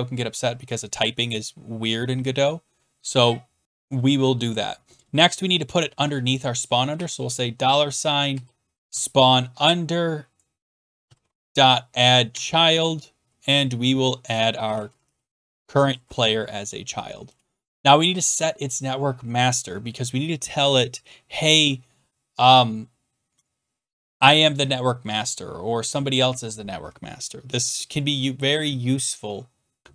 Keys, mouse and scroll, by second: 0.5 scroll down 3, 2.3 click, 6.9 shift+4, 8.3 p, 8.9 Tab, 10.8-11.9 typing, 12.3 Tab, 14.4-15.5 typing, 15.5 Tab, 16.5 Right, 16.5 typing, 17.2 Return, 29.1 click, 29.8 scroll down 10.